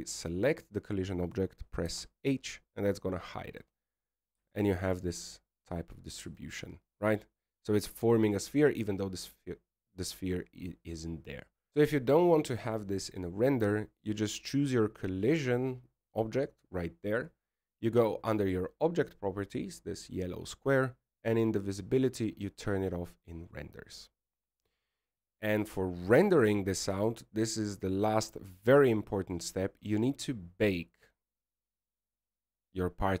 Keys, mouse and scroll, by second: 1.3 click, 2.3 right click, 4.0 h, 5.9-6.3 scroll up 5, 6.6 shift+middle click, 7.3 scroll down 2, 7.9-8.3 scroll down 2, 8.5 shift+middle click, 8.7-9.1 scroll up 2, 11.7 alt+a, 16.3 click, 24.1 click, 26.6 click, 27.8-28.3 scroll down 4, 28.3-29.0 scroll up 1, 29.0 right click, 29.0 scroll up 2, 31.3 click, 32.0-33.0 scroll down 12, 33.0-33.2 scroll down 12.